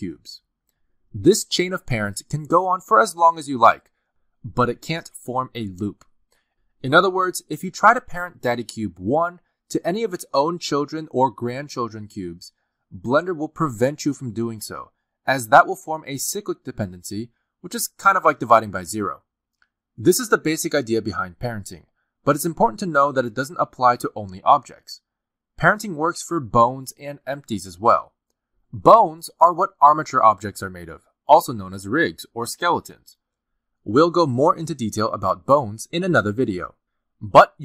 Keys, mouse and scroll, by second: 0.4 r, 0.9 click, 1.4 click, 1.6 r, 3.0 click, 3.1 g, 4.1 click, 4.2 g, 5.1 r, 6.3 click, 6.8 click, 7.1 g, 7.9 click, 8.1 g, 8.9 click, 8.9 g, 10.0 click, 10.1 g, 10.9 middle click, 12.0 click, 12.2 g, 12.9 click, 14.2 shift+click, 14.9 right click, 23.7-24.2 scroll up 1, 24.5-25.5 scroll down 2, 26.9 scroll down 1, 27.3 shift+middle click, 37.3 r.